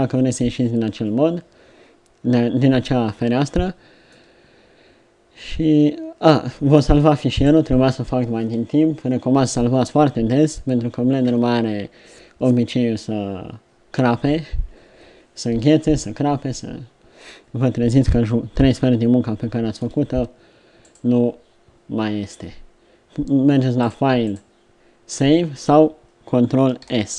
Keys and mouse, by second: 0.0 Escape, 3.6-5.7 middle drag, 18.6 middle click.